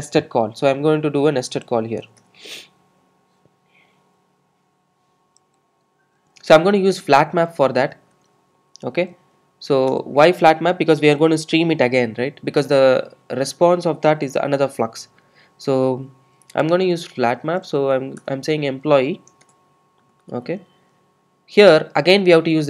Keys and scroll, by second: 2.1 alt+Return, 10.0 Return, 18.3 Return.